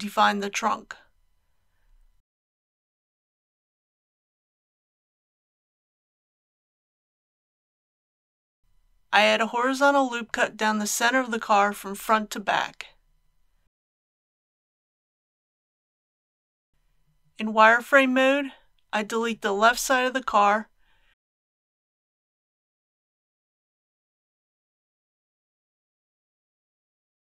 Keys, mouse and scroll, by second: 0.0 ctrl+r, 0.5 click, 8.9 KP_1, 12.8 ctrl+r, 13.5-15.1 drag, 16.0 KP_7, 17.5 z, 17.9 KP_4, 19.9-20.4 scroll down 1, 20.8-21.4 scroll down 2, 22.2-26.1 drag, 26.6 x.